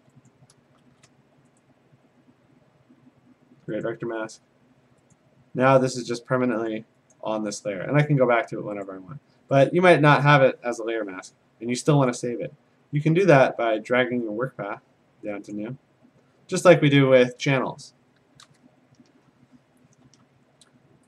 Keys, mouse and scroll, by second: 0.0 a, 0.3 click, 0.9 shift+a, 1.9 right click, 3.9 click, 5.2 click, 5.9 click, 6.9 click, 7.7 click, 8.0 a, 8.9 click, 9.7 click, 12.1 click, 13.4 click, 15.5 click, 17.5 ctrl+z.